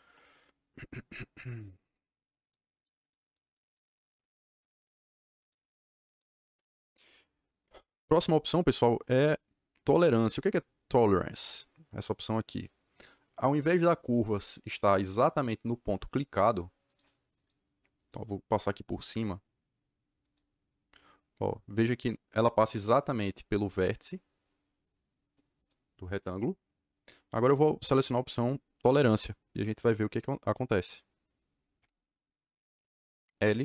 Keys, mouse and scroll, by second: 1.2-1.6 scroll up 2, 1.6-2.0 scroll down 2, 2.4 click, 2.7 click, 2.8 scroll up 2, 2.9 click, 3.1 click, 3.4 click, 3.6 click, 3.8 click, 5.3 click, 6.0 click, 16.3 click, 16.8 click, 17.3 click, 20.2 click, 31.7 l.